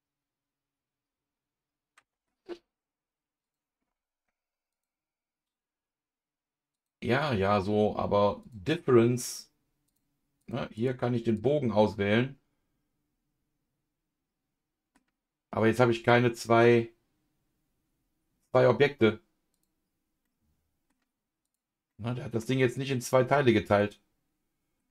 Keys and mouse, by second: 3.4 click, 4.7-6.8 drag, 8.4 click, 9.8 click, 10.7 click, 12.1-14.9 middle drag, 19.5 click, 20.2 middle click, 21.4 click, 21.9 middle click, 22.7 click, 23.2-24.8 middle drag.